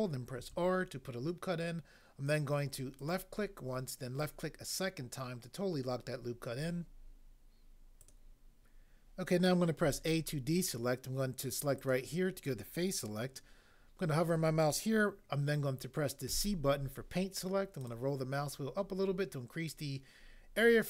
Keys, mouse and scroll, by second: 0.3 ctrl+r, 3.0 click, 9.8 a, 11.9 click, 16.2 c, 17.8 scroll down 1.